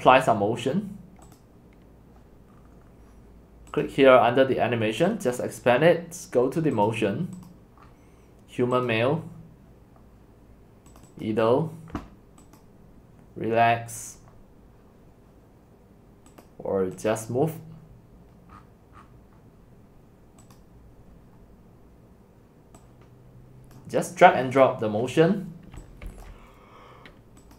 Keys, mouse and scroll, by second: 1.4-2.5 drag, 2.5 scroll, 2.6 scroll down 1, 2.6 scroll down 1, 2.7 scroll down 1, 2.8 scroll down 1, 2.8 scroll down 1, 2.9 scroll down 1, 3.1-3.8 scroll down 1, 3.8-5.7 right drag, 5.7 click, 5.7-6.9 middle drag, 5.7 scroll, 6.9-7.8 drag, 7.8 middle click, 7.8 scroll, 7.8-8.9 scroll up 6, 8.9-12.6 drag, 12.6-17.0 right drag, 17.0-18.5 drag, 18.5-20.6 middle drag, 18.5-20.6 scroll down 16, 20.6-23.1 drag, 23.1 right click, 25.2-25.8 scroll, 25.8 x, 26.1 c, 26.2 right click.